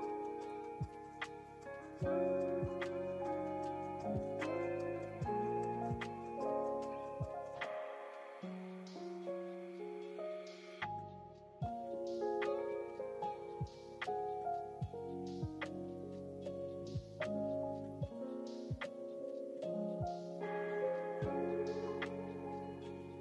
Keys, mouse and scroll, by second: 0.0 click, 1.0 click, 1.7 click, 3.1 click, 5.7 click, 6.5 click, 8.5 click, 10.1 g, 14.6 click, 15.6 click, 19.9 g.